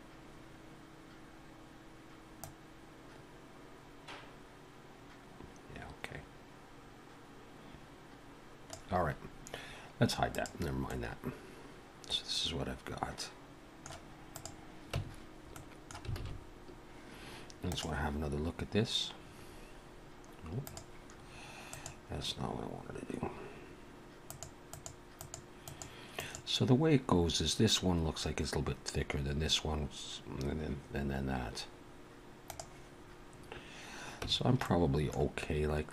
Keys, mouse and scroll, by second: 2.4 click, 10.3 click, 10.9 middle click, 14.3 click, 14.9 Tab, 15.5 middle click, 16.2 alt+a, 34.2 Tab, 34.6 middle click.